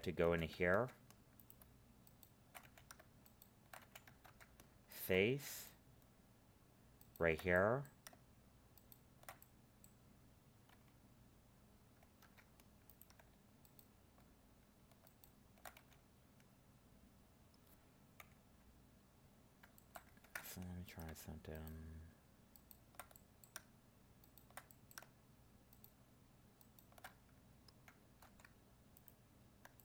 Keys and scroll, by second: 0.7 ctrl+Tab, 4.2 ctrl+Tab, 12.2 ctrl+Tab, 20.2 ctrl+Tab, 28.2 ctrl+Tab.